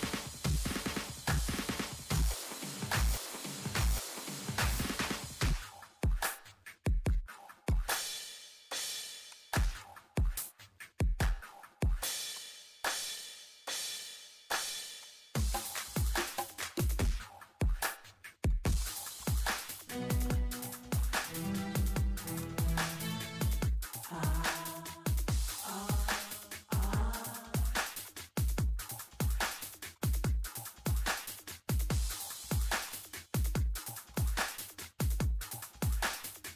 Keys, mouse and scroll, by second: 2.2 Escape, 2.7 click, 6.0 Escape, 6.3 click, 6.4-7.2 typing, 7.3 click, 8.6 8, 8.8 Return, 9.3 click, 9.8 middle click, 12.3 click, 14.7 Escape, 15.0 click, 15.3 right click, 15.7 right click, 15.9 click, 16.6 ctrl+8, 17.0 click, 17.8 Escape, 18.2 Delete, 18.5 click, 18.6 Delete, 18.8 click, 18.8 Delete, 19.2 click, 19.2 Delete, 19.5 click, 19.7 click, 20.0 click, 20.6 click, 23.7 Escape, 24.4 click, 24.7-25.5 typing, 25.5 click, 26.7 typing, 27.1 Return, 27.4 click, 28.1 middle click, 29.2 ctrl+8, 29.6 click, 30.7 Escape, 30.8 click, 32.1 6, 32.2 Return, 32.8 click, 33.4 5, 33.6 Return, 33.9 click, 34.5 click, 34.9 middle click, 35.4 click, 36.1 middle click.